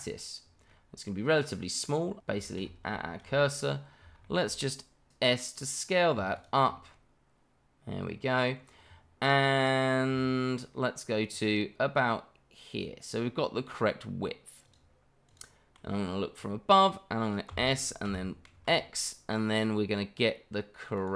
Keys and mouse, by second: 0.7-1.8 middle drag, 2.5-2.8 middle drag, 3.0 shift+middle drag, 3.5 shift+middle click, 4.5 shift+middle drag, 5.1 s, 6.9-8.5 middle drag, 9.6 click, 10.1 s, 14.6 click, 15.2 click, 17.5 s, 18.0 y, 18.5 x.